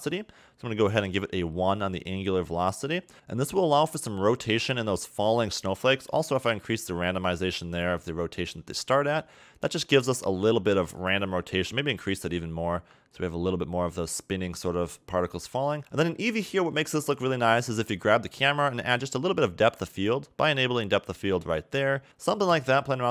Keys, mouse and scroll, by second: 0.0 click, 3.1 a, 5.6 click, 11.1 click, 15.8 click, 20.1 click, 20.9 click, 22.0 click.